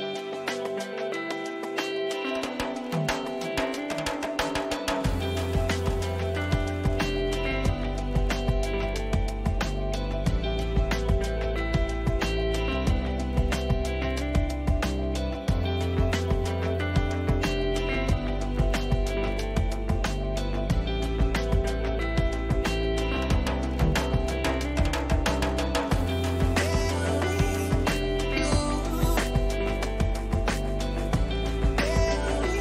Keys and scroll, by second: 0.4 ctrl+-, 0.9 ctrl++, 3.9 Up, 14.0 ctrl+j, 21.9 Return, 26.0 ctrl+-, 31.6 space.